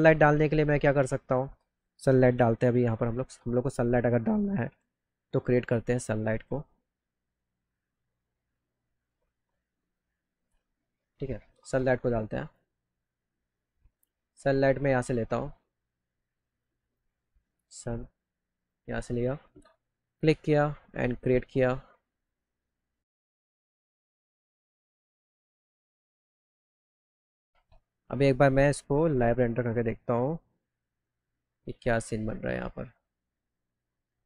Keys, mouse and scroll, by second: 3.6 click, 5.4 middle click, 5.8 middle click, 8.9 click, 9.5 middle click, 9.8 click, 12.4 click, 16.5 click, 16.8 click, 18.5 click, 20.4-21.6 drag, 24.2 click, 25.4 middle click, 25.5 middle click, 25.6 middle click, 25.7 middle click, 25.8 click, 25.9 click, 26.2 click, 26.4 click, 27.0 click, 27.1 click, 27.2 click, 31.7 click, 34.0 click.